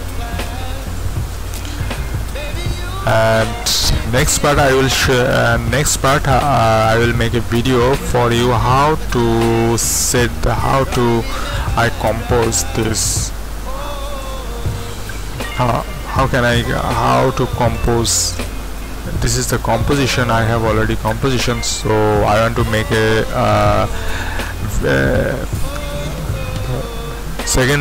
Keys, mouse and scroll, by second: 0.3-3.5 drag, 10.7 click, 17.7-19.8 drag, 19.8-27.8 scroll down 1.